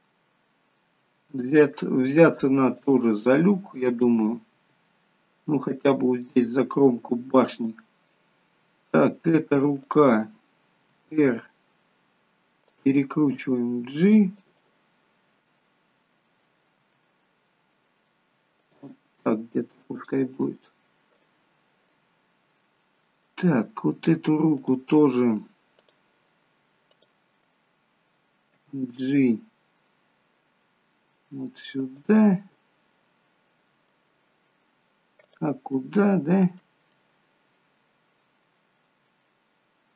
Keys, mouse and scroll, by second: 0.2 middle click, 1.3 g, 3.2 middle click, 4.6 g, 8.6 middle click, 9.9 click, 10.9 r, 13.5 g, 15.4 middle click, 16.9 g, 19.3 middle click, 21.1 click, 21.9 middle click, 24.6 click, 25.7 click, 27.0 click, 28.5 g, 32.2 middle click, 34.1-35.3 scroll down 1, 35.3 click, 35.3-35.8 scroll down 1, 35.8 middle click, 36.9 middle click.